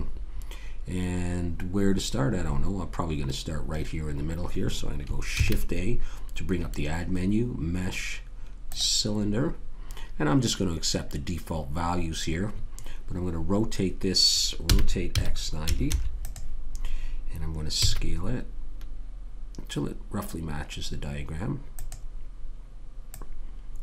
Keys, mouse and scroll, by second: 5.4 shift+a, 14.6 r, 17.8 s, 23.1 click.